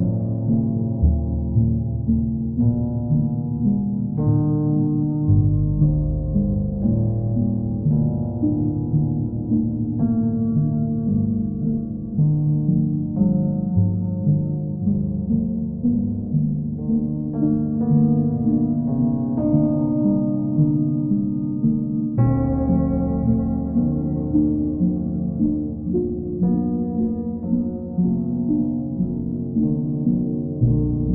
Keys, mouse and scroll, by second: 8.1 click, 9.0 alt+click, 9.8 alt+click, 10.3 alt+click, 11.1 click, 13.8 click, 14.1 ctrl+click, 15.8 ctrl+click, 16.5 ctrl+click, 19.3 click, 20.5 alt+click, 21.0 alt+click, 23.6 click, 24.2 ctrl+click, 25.3 ctrl+click, 25.7 ctrl+click, 28.4 click, 29.3 alt+click, 29.7 ctrl+click.